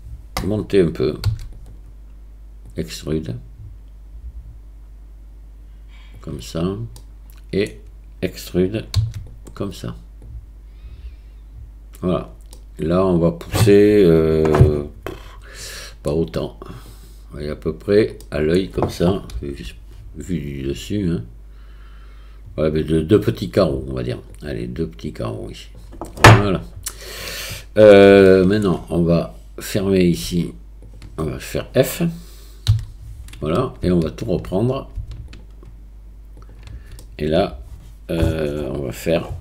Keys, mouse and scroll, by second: 1.3 e, 2.7-7.0 drag, 7.0 middle click, 9.0 e, 10.3-12.2 drag, 12.6-16.1 middle drag, 16.9-17.9 drag, 18.2 middle click, 19.4 KP_7, 24.4-25.8 drag, 26.2-27.9 middle drag, 28.3 shift+middle click, 29.2-30.2 drag, 32.7 f, 35.3 shift+click, 36.4 shift+click, 37.0-39.4 middle drag.